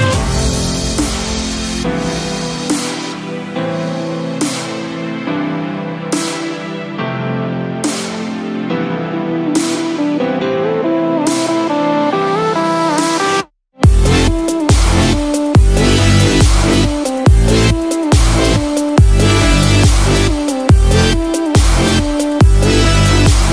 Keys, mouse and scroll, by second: 8.9 click, 11.8-12.2 scroll down 4, 13.2 alt+z, 14.0 scroll down 1, 14.8-15.2 scroll up 2, 15.2 alt+z, 15.8 shift+z, 16.3-16.7 scroll down 2, 16.7 middle click, 18.3 scroll up 2, 18.6 middle click, 20.0 click, 20.3 Tab, 20.9 middle click, 21.7 scroll up 1, 22.6 click.